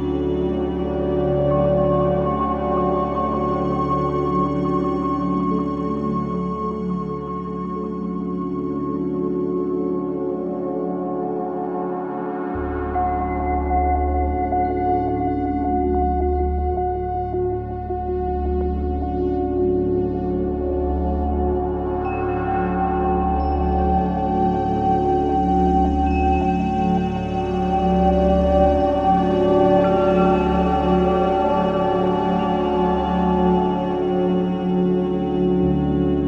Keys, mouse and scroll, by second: 2.2 click, 3.1 click, 3.4 click, 3.6 scroll down 1, 5.1 Tab, 5.3 click, 5.7 shift+click, 6.4 click, 7.3 scroll down 1, 7.8 click, 8.1-9.1 middle drag, 9.1 click, 9.9-10.7 middle drag, 10.7 click, 11.3 click, 12.1 scroll down 1, 12.3-12.9 middle drag, 12.9-13.5 scroll up 1, 13.5 click, 14.1-14.9 drag, 15.2 middle click, 15.5 scroll down 1, 15.7-16.4 middle drag, 16.4 KP_1, 16.8-18.3 shift+middle drag, 19.5-23.3 middle drag, 23.3 scroll up 1, 23.5 shift+middle click, 24.1-25.6 scroll down 1, 25.6 KP_1, 25.9 KP_3, 26.4 shift+middle click.